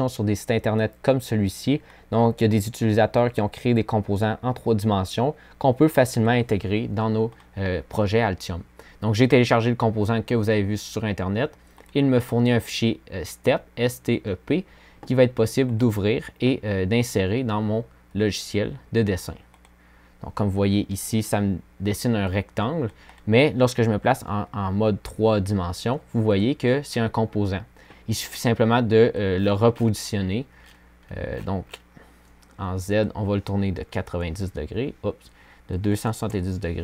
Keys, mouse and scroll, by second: 23.0 3.